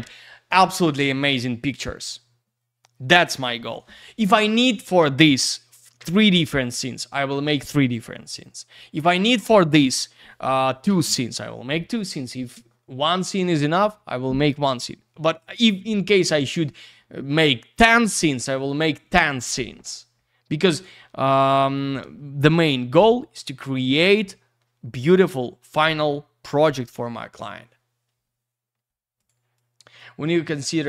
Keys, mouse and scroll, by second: 29.2 click, 29.2 click, 29.5 click, 30.2 click, 30.5 click.